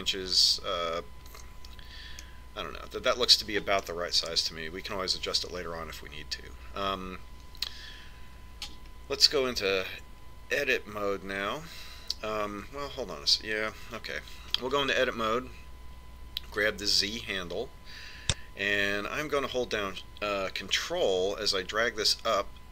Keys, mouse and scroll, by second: 3.7-5.7 middle drag, 5.7 KP_1, 11.2 Tab, 14.2 Tab, 15.4 Tab, 18.2 click, 18.6 click.